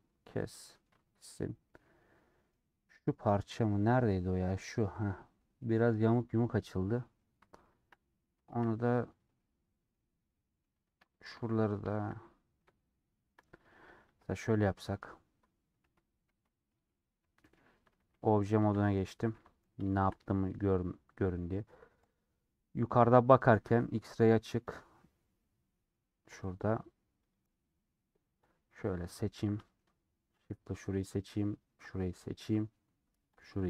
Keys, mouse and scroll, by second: 2.3 middle click, 2.9-3.4 scroll up 1, 3.4-3.9 scroll up 1, 3.9 scroll up 1, 4.0-6.8 middle drag, 6.8-7.1 scroll down 2, 7.1-8.7 middle drag, 8.7-9.0 scroll up 1, 9.0 scroll down 1, 9.3-12.1 middle drag, 12.1-12.6 scroll up 2, 12.6-14.0 middle drag, 14.0 KP_7, 14.9 KP_Decimal, 15.5-16.0 scroll up 4, 16.0 3, 17.4 /, 18.5 shift+middle click, 18.7 scroll up 2, 19.6 scroll up 1, 19.9 shift+middle click, 20.2 scroll down 1, 20.6 scroll up 1, 22.1 click, 29.2 click, 29.6-31.0 shift+middle drag, 31.0 shift+click, 32.3 shift+click.